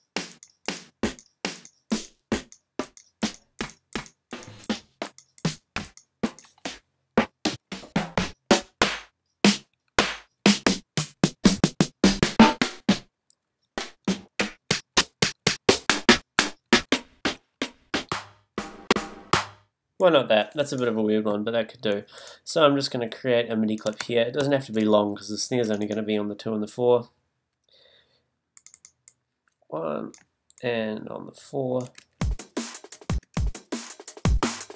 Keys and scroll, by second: 6.9 Down, 24.4 shift+super+m, 33.3 super+space.